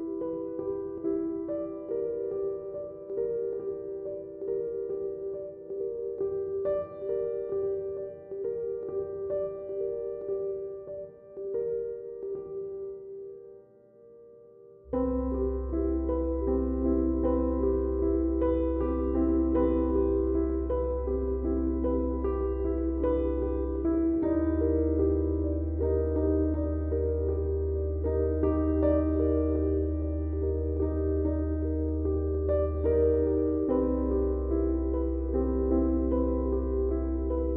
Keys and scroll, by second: 2.2 ctrl+z, 5.3 F1, 25.0 3, 32.8 Delete, 35.1 Delete.